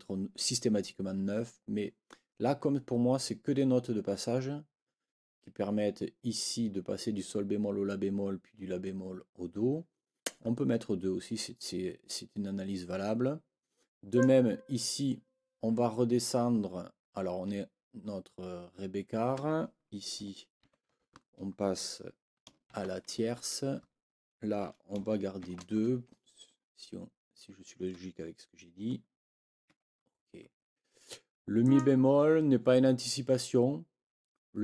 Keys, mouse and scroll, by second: 14.1 click, 20.6 ctrl+l, 23.8 Right, 29.7 Escape, 31.6 click.